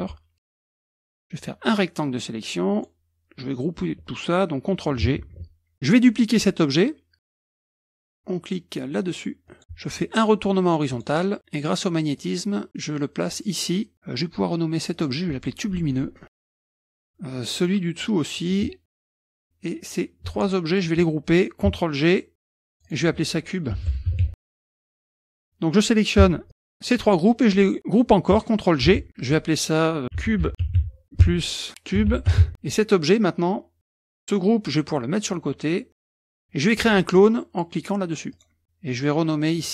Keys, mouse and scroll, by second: 0.5 click, 1.7-3.2 drag, 5.3 ctrl+g, 7.2 click, 9.5 click, 10.9 click, 12.2-13.9 drag, 14.9-16.0 drag, 16.1-17.3 typing, 17.6 click, 18.4 click, 19.0 ctrl+c, 19.1 click, 19.2 ctrl+v, 19.8 click, 20.3 shift+click, 22.5 ctrl+g, 22.7 click, 23.6-24.7 typing, 25.4 click, 26.5 shift+click, 28.9 ctrl+g, 29.1 click, 30.0-32.9 typing, 31.2 KP_Add, 35.2 click, 36.2-37.2 middle drag, 36.2-37.2 scroll up 1, 38.3 click, 39.4 click.